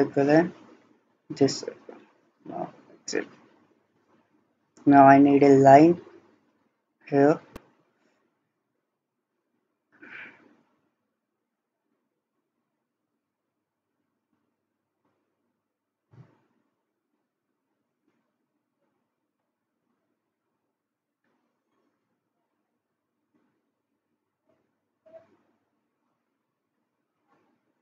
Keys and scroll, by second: 2.1 Escape.